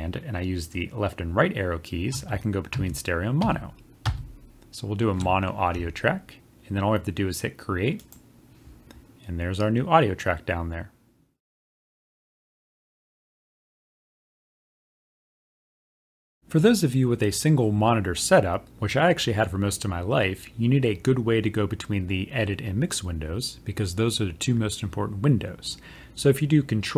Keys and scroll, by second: 16.6 ctrl+=.